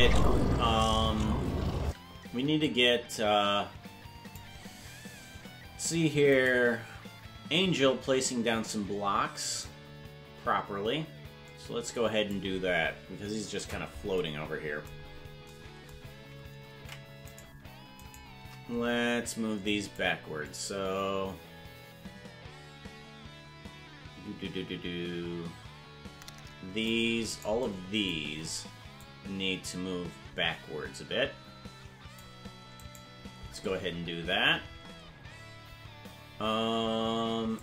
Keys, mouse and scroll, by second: 2.7-4.4 drag, 6.4 right click, 9.7-12.4 drag, 13.4 KP_Decimal, 15.0 scroll down 3, 16.8 ctrl+Tab, 17.4 right click, 18.1 shift+right click, 20.0-26.9 drag, 27.3 right click, 28.2 c.